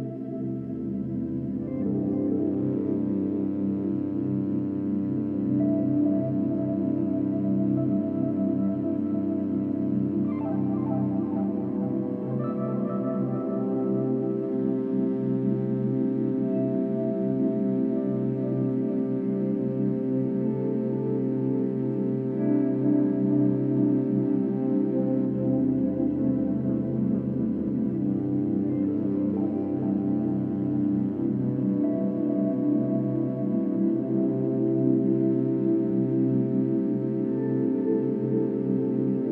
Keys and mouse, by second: 0.2-4.5 alt+drag, 5.3 ctrl+alt+click, 6.1 ctrl+alt+click, 6.7-10.2 ctrl+alt+drag, 10.2 1, 10.8-13.0 ctrl+alt+drag, 13.8-14.7 drag, 17.2-22.0 alt+drag, 22.7 click, 23.1 drag, 24.4 click, 26.2 shift+click, 29.3 click, 30.5-31.3 drag, 32.6 click, 33.6-35.4 shift+drag, 35.9-37.4 drag, 37.5-38.4 shift+drag.